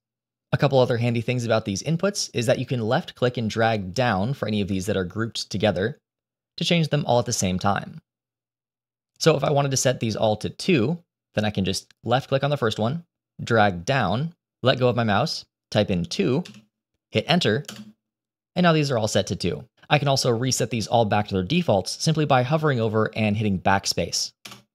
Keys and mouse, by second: 3.8-10.0 drag, 12.0-17.6 drag, 24.4 BackSpace.